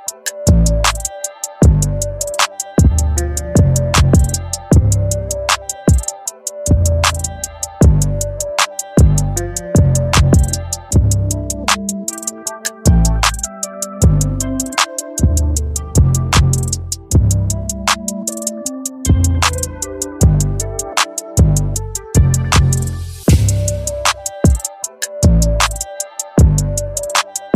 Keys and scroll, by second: 10.5 ctrl+j, 14.5 ctrl+t.